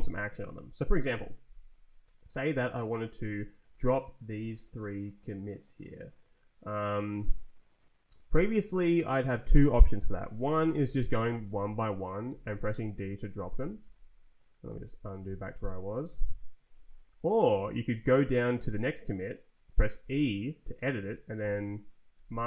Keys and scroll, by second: 0.0 Up, 3.5 Down, 4.2 Up, 10.8 d, 11.4 Return, 12.2 d, 12.7 Return, 13.5 d, 13.8 Return, 14.6 z, 15.2 Return, 15.8 z, 16.0 Return, 16.5 z, 16.7 Return, 17.4 Down, 19.9 e, 20.9 Up, 21.3 f, 22.1 d, 22.4 Up.